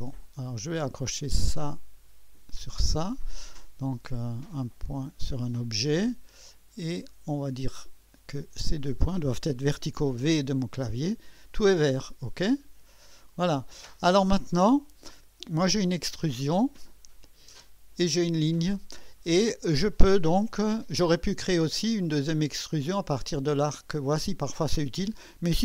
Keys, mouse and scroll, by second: 0.4 click, 1.9 click, 4.6 click, 7.3 click, 8.6 click, 12.4 click, 15.6 click, 17.2 click, 22.1-22.7 drag.